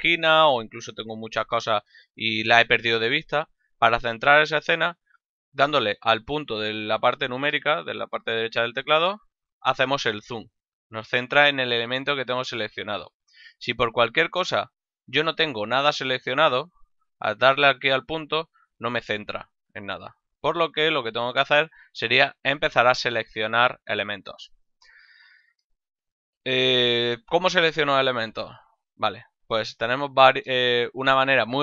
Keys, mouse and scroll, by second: 1.3 ctrl+middle click, 1.9 shift+middle click, 8.9 KP_Decimal, 10.8 ctrl+middle click, 14.7 a, 15.2 ctrl+middle click, 17.2 KP_Decimal, 17.9 middle click, 18.6 KP_Decimal, 19.9 middle click, 21.2 middle click.